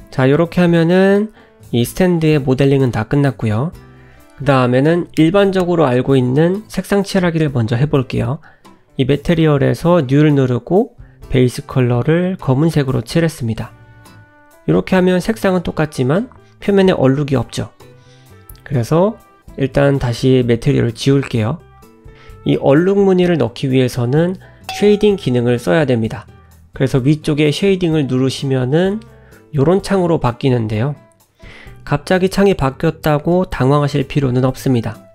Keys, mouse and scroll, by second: 0.0 `, 0.7 shift+middle click, 6.0 scroll up 2, 7.4 click, 9.2 click, 10.4 click, 12.6 click, 17.0 click, 18.0 ctrl+z, 18.3 click, 18.6 click, 20.5 click, 22.0 click, 23.1 middle click, 24.0 click.